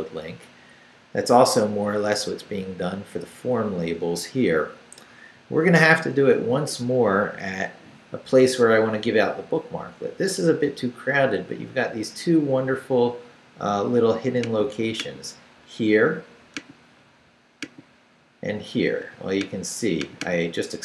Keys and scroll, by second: 1.7 Up, 2.4 Up, 5.2 Down.